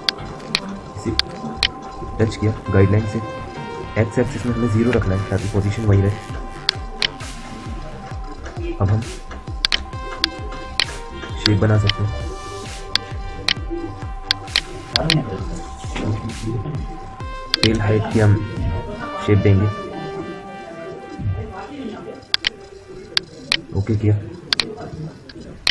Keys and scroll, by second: 15.9 F9.